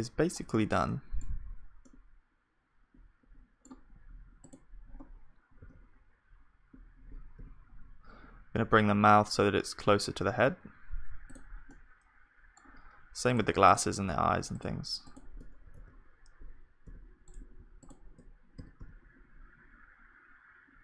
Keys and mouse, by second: 0.0-4.9 middle drag, 4.9-6.4 drag, 5.5 right click, 5.5 g, 6.4-15.7 middle drag, 13.3-17.1 drag, 15.7 g, 17.8-19.8 drag, 18.6 g.